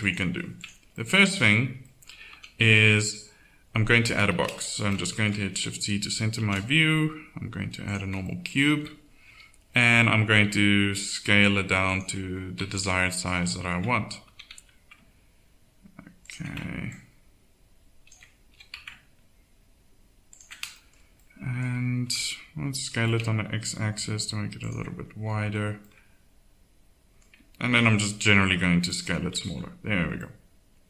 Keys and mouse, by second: 0.6 click, 2.3 a, 4.3 shift+c, 6.3 shift+a, 9.2 KP_7, 10.3 s, 12.7 KP_1, 14.3 s, 18.5 s, 22.0 KP_7, 22.9 KP_7, 22.9 s, 27.6 s, 29.4 KP_1.